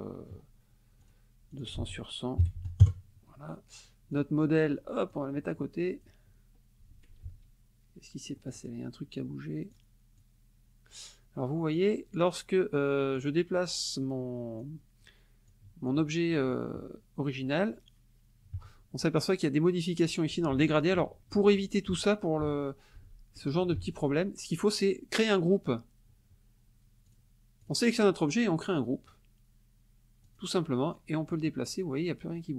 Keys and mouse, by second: 1.0 click, 1.5 ctrl+click, 1.8 ctrl+a, 2.5 KP_0, 2.8 KP_Enter, 4.1 click, 5.1 click, 7.2 ctrl+z, 8.4-10.4 drag, 11.7-12.4 drag, 13.2-13.8 drag, 14.6 click, 15.5 click, 16.8 KP_Subtract, 20.5 ctrl+z, 23.8 ctrl+shift+z, 27.1 click, 27.6 click, 30.3 click, 31.3-32.5 drag.